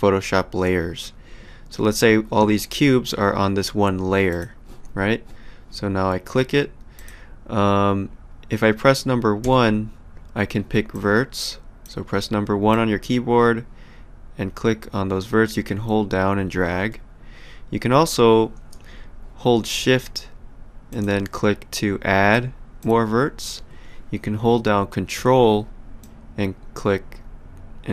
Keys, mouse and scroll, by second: 4.3 click, 6.9 click, 9.4 1, 10.9 click, 12.7 click, 20.9 shift+click, 22.8 shift+click, 26.0 ctrl+click.